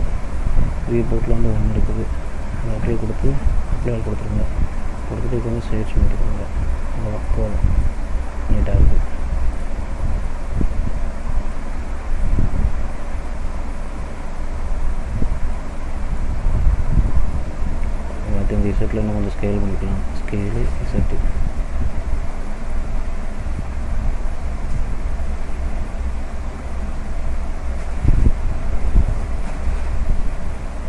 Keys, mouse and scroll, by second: 2.0 middle click, 3.9 click, 5.0 right click, 6.9 middle click, 7.4-7.8 scroll up 1, 7.8 middle click, 8.3-8.7 scroll down 1, 8.8 middle click, 10.0 middle click, 10.5-11.0 scroll down 2, 11.0 middle click, 12.4 middle click, 14.0-14.4 scroll up 2, 14.4 middle click, 15.1 scroll down 1, 15.6 middle click, 16.5 middle click, 18.1 click, 20.1 s, 22.0 ctrl+z, 22.4 middle click, 24.1 s, 27.8 middle click, 29.0-29.3 scroll down 2, 29.4 middle click, 30.7 scroll down 1.